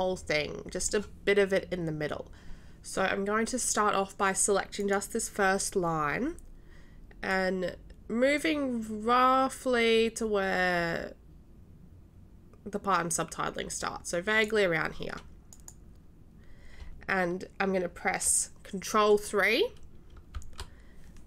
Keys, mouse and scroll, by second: 4.8 click, 7.3-14.5 drag, 15.5 click, 20.5 ctrl+3.